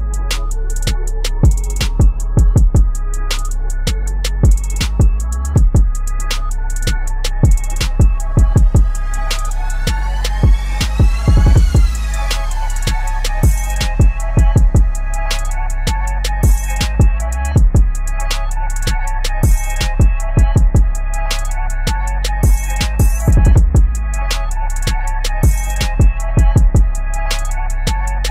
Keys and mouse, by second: 1.7 click, 4.1 click, 4.4 click, 6.5 ctrl+t, 8.5-15.4 shift+drag, 19.8 click, 21.9 ctrl+a, 24.7-28.2 drag.